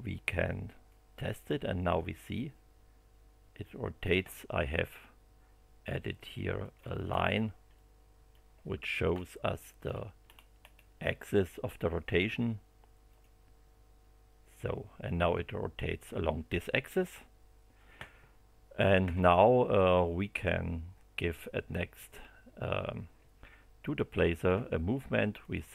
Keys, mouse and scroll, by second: 0.8-4.3 drag, 6.6 click, 7.0 space, 7.7 click, 9.1 shift+middle click, 10.2-10.9 shift+scroll up 5, 13.1 click, 23.8 click, 25.4 click.